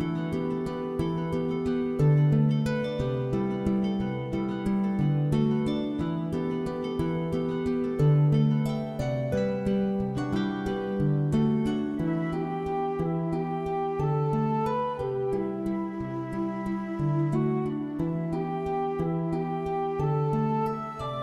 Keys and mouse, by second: 0.1 shift+click, 0.3 shift+click, 0.8 shift+click, 1.2 shift+click, 1.6 shift+middle click, 1.9 alt+z, 2.1 click, 2.3 g, 2.8 click, 3.0 click, 3.6 middle click, 4.1 g, 4.7 click, 5.1 click, 5.3 g, 5.6 click, 6.0 e, 6.6 click, 6.8 s, 7.2 click, 7.4 shift+middle click, 8.0 click, 8.2 shift+middle click, 8.4 alt+z, 8.5 middle click, 8.8 middle click, 9.2 middle click, 10.5 3, 11.4 s, 13.1 click, 13.3 alt+click, 13.5 alt+click, 14.5 ctrl+s, 15.1 alt+middle click, 15.2 alt+middle click, 15.6 alt+shift+z, 15.6 shift+middle click, 16.0 click, 16.2 1, 16.5 g, 16.9 click, 17.1 click, 17.5 alt+z, 17.5 middle click, 17.9 middle click, 18.1 3, 18.4 shift+click, 18.7 middle click, 18.9 alt+middle click, 19.2 e, 19.7 click, 19.8 middle click, 20.4 middle click, 20.5 middle click, 20.7 alt+z, 20.9 g.